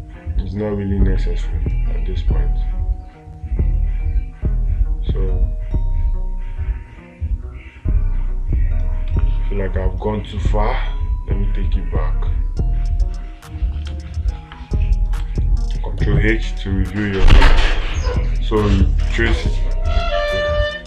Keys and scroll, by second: 9.5 space, 14.8 space.